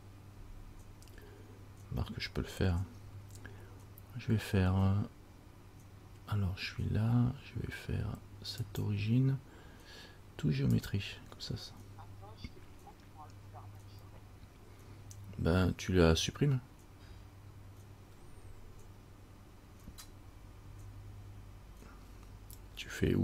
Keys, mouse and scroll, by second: 8.8 click.